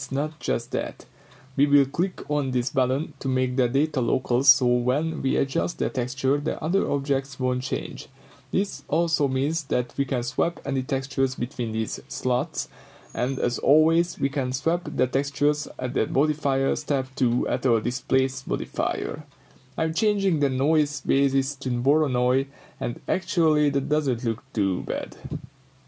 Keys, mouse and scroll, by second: 1.3 scroll up 1, 1.5 click, 2.8 click, 3.8-12.3 middle drag, 5.2 s, 7.2 Escape, 7.4-10.2 right drag, 10.6 s, 12.3 click, 12.4-16.7 middle drag, 14.6-14.9 scroll up 2, 15.8 g, 16.7 click, 17.0 Tab, 17.2-24.2 middle drag, 17.8 Tab, 24.2-25.8 drag.